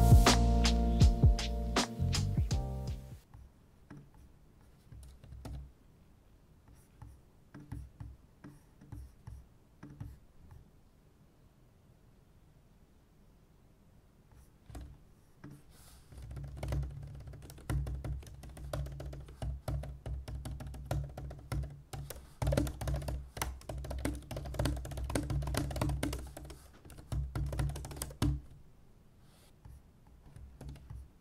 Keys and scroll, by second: 5.4 super+,, 16.1-28.9 typing, 17.5 Escape, 18.3 ctrl+d, 18.6 ctrl+d.